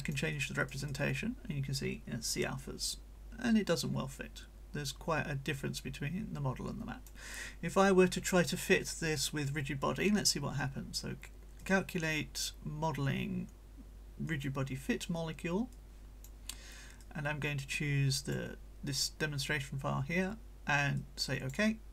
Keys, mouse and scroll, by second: 0.3-7.2 right drag, 11.7 click, 14.3 click, 15.7 click, 17.0-18.5 drag, 21.0 click.